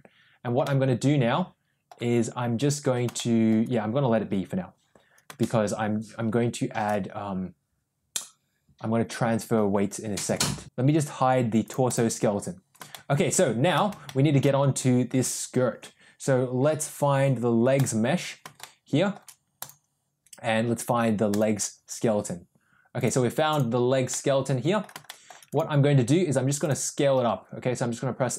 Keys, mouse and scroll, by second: 0.5-1.7 middle drag, 3.0-3.4 shift+middle drag, 5.3-6.7 shift+middle drag, 11.5 click, 11.8 click, 12.8-13.6 shift+middle drag, 13.9-14.3 shift+middle drag, 17.8 click, 18.5-19.0 shift+middle drag, 19.4 click, 21.2 click, 23.4 click, 24.0-24.7 middle drag, 24.9 shift+middle drag, 25.4 click, 26.5 click, 27.0 s.